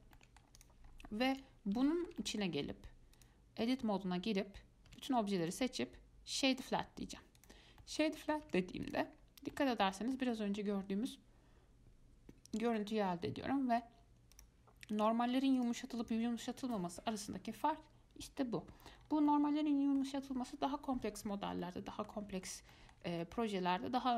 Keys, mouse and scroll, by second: 0.0-0.4 scroll down 2, 0.4-0.8 middle drag, 0.8 click, 1.1 scroll up 2, 1.5 click, 2.1-3.4 shift+middle drag, 3.4-5.1 drag, 5.1 a, 5.6-7.6 right drag, 7.6 click, 8.0 middle click, 8.7 Tab, 9.1 click, 9.3-9.7 scroll up 2, 9.7-10.9 middle drag, 10.9 scroll up 2, 13.0-14.1 middle drag, 14.1 scroll down 1, 14.5 click, 15.2 click, 15.8 click, 16.2 click, 19.2 scroll down 3, 19.5 scroll up 1, 19.5-22.6 middle drag, 22.6 scroll up 2, 22.9-24.1 shift+middle drag.